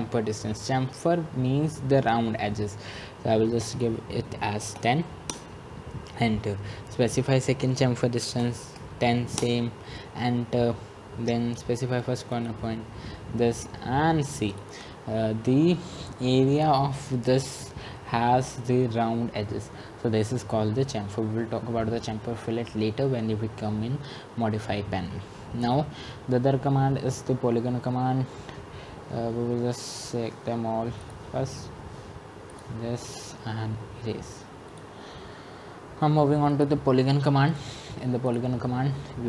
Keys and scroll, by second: 4.8 Return, 5.5-6.2 typing, 8.7 Return.